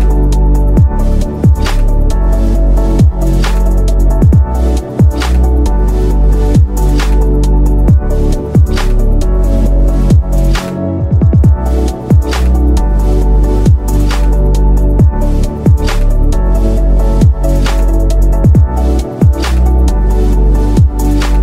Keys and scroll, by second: 0.3 shift+F2, 0.7 F3, 3.0 shift+F2, 3.4 F3, 6.1 shift+F2, 6.7 Escape, 14.4 F3, 16.5 ctrl+z, 21.0 Escape.